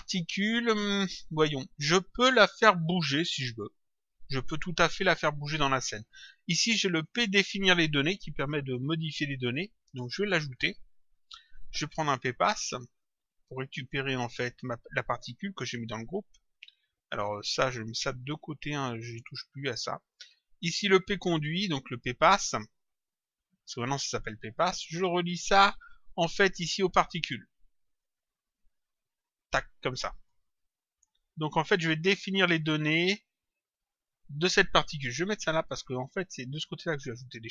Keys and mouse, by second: 6.9 click, 9.4 click, 13.6 click, 17.3 click, 18.8 click, 21.0 click, 23.2 click, 28.0 click, 30.2 click, 32.2 click, 33.7 click.